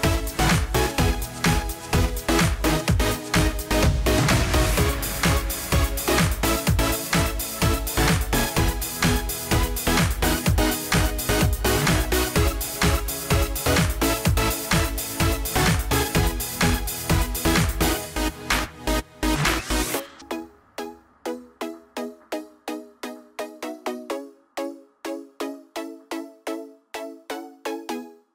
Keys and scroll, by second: 10.8 ctrl+a, 22.1 ctrl+a.